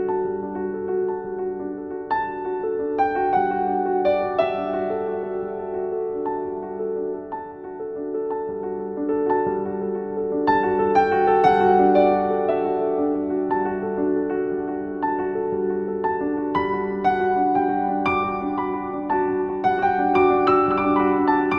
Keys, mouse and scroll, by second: 0.4-2.3 shift+drag, 2.3-5.1 alt+shift+drag, 5.1 scroll up 1, 5.3-7.3 typing, 5.5 click, 6.1 click, 6.4 click, 6.7 click, 6.9 click, 7.2 click, 8.0 ctrl+z, 8.6-10.2 drag, 10.2 right click, 10.9 click, 12.1-20.9 shift+drag, 20.6-21.5 typing.